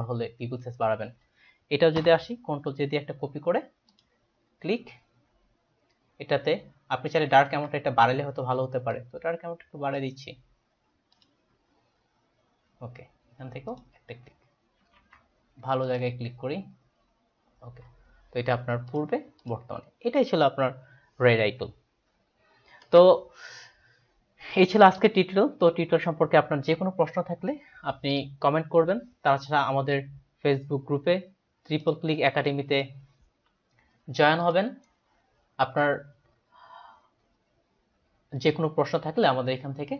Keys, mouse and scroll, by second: 2.0 ctrl+j, 3.9 click, 7.5 ctrl+z, 9.0 click, 11.2 click, 15.1 ctrl+z, 15.8 click, 19.0 click, 31.8 click, 32.5 click, 34.5 click.